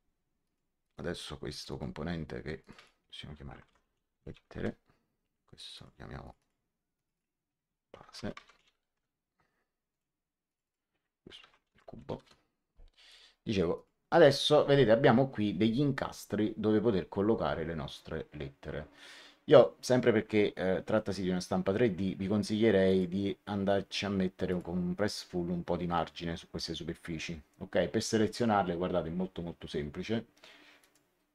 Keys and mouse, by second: 0.3 click, 3.6-4.8 typing, 5.6 click, 7.7-9.0 typing, 11.1-12.4 typing, 13.0 click, 22.8 click, 24.4 click, 30.7 click.